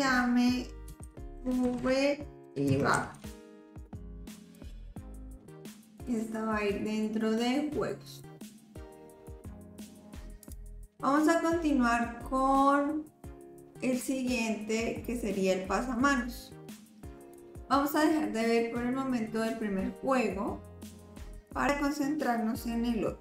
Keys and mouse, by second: 6.0-8.2 drag, 10.4 click, 17.3 click.